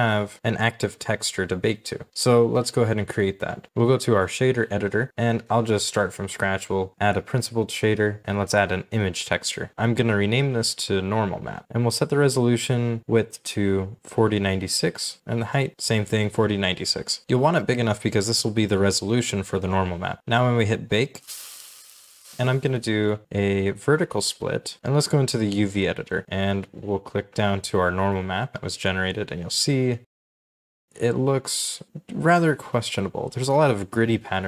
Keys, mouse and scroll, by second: 8.2 shift+middle click, 8.6-10.0 typing, 10.9-11.3 scroll up 1, 12.0-13.9 typing, 15.0-18.2 typing, 16.7 double click, 22.3 right click, 27.9-28.8 scroll down 1, 31.1 scroll up 1, 32.0 shift+middle click, 34.1 shift+middle click.